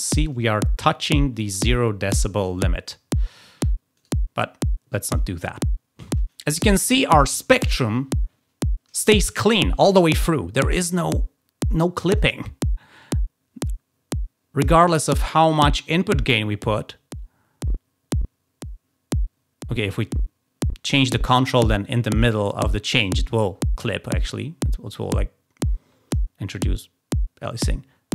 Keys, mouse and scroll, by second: 3.9 right click, 11.7 click, 12.9-14.6 drag, 15.5-21.7 drag, 24.1-26.1 drag.